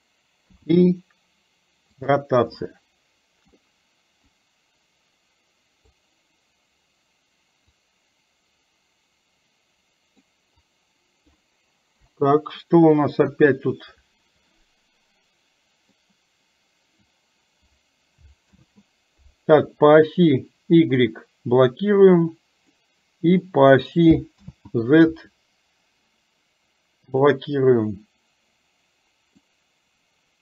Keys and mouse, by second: 2.6 middle click, 4.4-6.0 drag, 7.9-10.4 drag, 10.6 click, 12.1 Delete, 13.4 KP_1, 16.0-17.1 drag, 18.6 ctrl+z, 21.6-22.8 drag, 24.5 ctrl+z, 27.1 click, 29.6-30.4 drag.